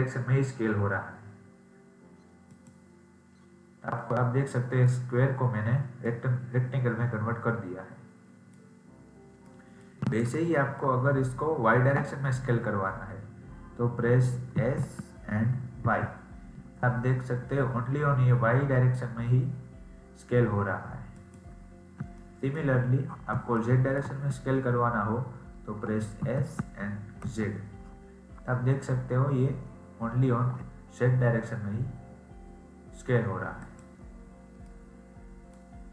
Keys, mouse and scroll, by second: 4.1-5.1 middle drag, 5.1-6.0 scroll up 2, 6.0-8.9 middle drag, 8.9-9.4 scroll down 2, 9.4-13.5 middle drag, 21.6-22.1 scroll down 3, 22.1-26.1 middle drag, 26.1 s, 34.2-34.6 scroll down 2, 34.6-35.9 middle drag.